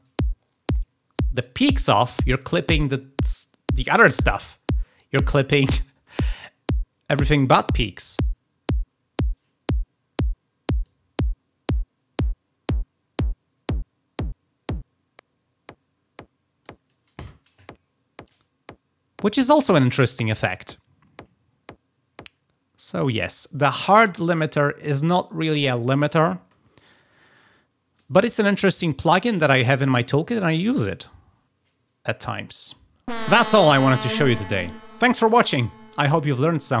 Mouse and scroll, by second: 10.7-16.6 drag, 33.0-36.8 drag.